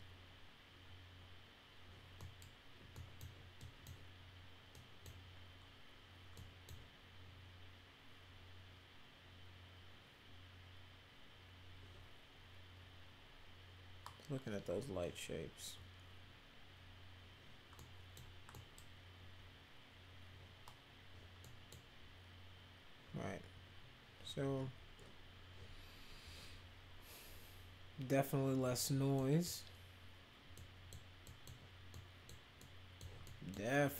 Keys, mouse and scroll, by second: 2.1 middle drag, 2.9 middle click, 3.5 middle click, 4.7 middle click, 6.3-6.6 middle drag, 17.7 middle click, 18.5 middle click, 21.3 middle click, 29.1 middle drag, 30.5 middle click, 31.2 middle click, 31.9 middle click, 32.6 middle click, 33.2 middle click.